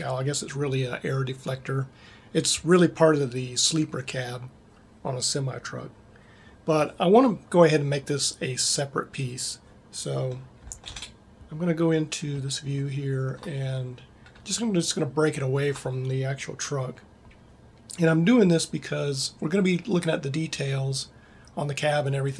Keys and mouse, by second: 10.8 ctrl+Up.